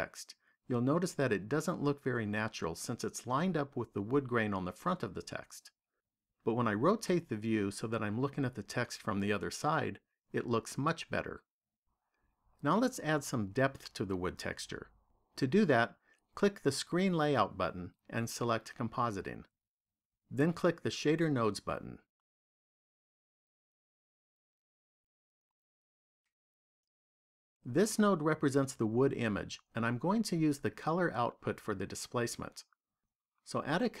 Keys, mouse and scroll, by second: 6.5 middle click, 17.0 click.